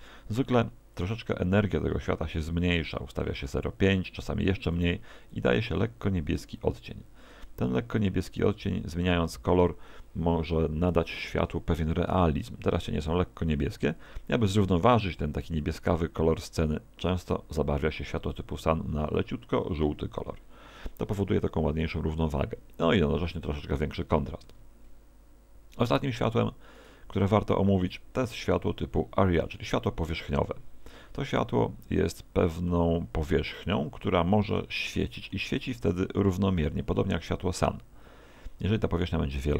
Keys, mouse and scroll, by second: 1.0 click, 5.3 click, 15.6 Escape, 17.3 right click, 18.3 click, 24.5 Escape, 26.8 right click, 27.0 x, 27.9 right click, 29.4 click, 32.2 middle click, 38.8 s.